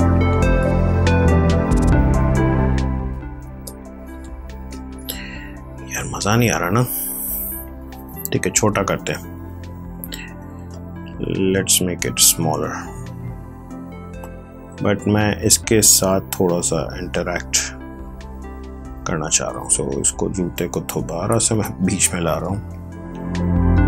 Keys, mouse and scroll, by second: 8.7 click, 9.2 ctrl+z, 10.1 ctrl+t, 11.5 click, 14.3 click, 20.0 click.